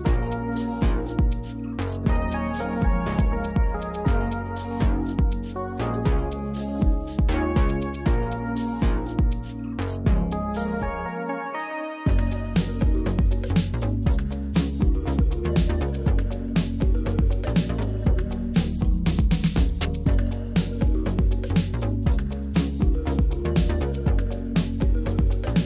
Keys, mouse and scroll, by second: 1.0 drag, 2.1 click, 2.9 click, 4.0 middle click, 4.4 Tab, 4.8 middle click, 6.7 click, 7.5 click, 11.0 shift+e, 14.6 click, 15.5 click, 16.8 alt+shift+click, 17.5 shift+e, 19.8 click, 20.0 middle click, 21.0 click, 21.4 alt+click, 22.1 alt+shift+click, 23.3 shift+e.